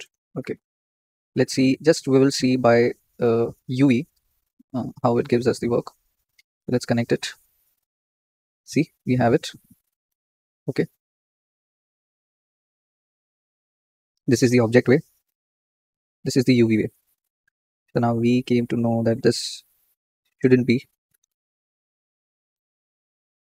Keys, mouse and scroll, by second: 0.0 ctrl+space, 0.7 Tab, 2.1-2.6 scroll down 4, 3.2-5.2 drag, 7.3-10.8 drag, 10.8 middle click, 11.5-15.6 scroll up 8, 15.6 scroll up 1, 15.8-18.2 drag, 18.2 Tab, 18.8-19.3 scroll down 3, 19.3 click, 20.8 ctrl+z, 21.0 ctrl+z, 21.2 ctrl+z, 21.5 ctrl+z, 21.7 ctrl+z, 21.9 ctrl+z, 22.1 ctrl+z, 22.6 ctrl+z, 22.8 ctrl+z, 23.0 ctrl+z, 23.3 ctrl+z.